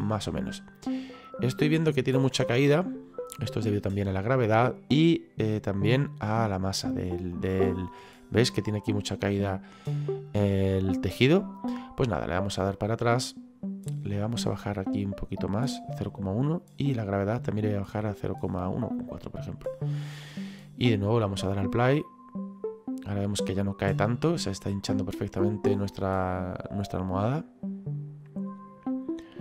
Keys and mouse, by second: 2.6 middle click, 6.9 middle click, 9.0 middle click, 10.7 middle click, 12.8 click, 15.0 click, 17.5 click, 20.7 click.